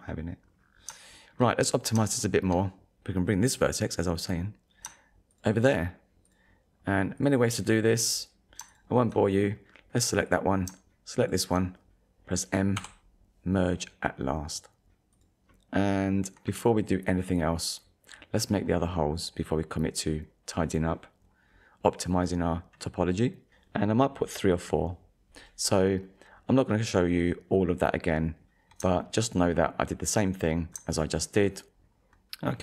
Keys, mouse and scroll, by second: 0.4 scroll up 1, 1.2 shift+middle click, 1.6 scroll up 1, 2.2 shift+middle click, 3.1 click, 5.3 shift+click, 6.3 click, 7.2 click, 8.7 shift+click, 10.3 click, 11.2 shift+click, 12.8 m, 15.1 shift+middle click, 15.1 click, 15.2 scroll down 2, 15.6 shift+middle click, 18.1-18.5 scroll down 1, 22.1-22.5 scroll up 1, 22.8 middle click, 23.7 ctrl+s, 25.4 click, 26.2 scroll up 1, 27.1-27.5 scroll down 1, 28.4 scroll up 1, 29.0 shift+middle click, 29.6 middle click, 31.0 shift+middle click.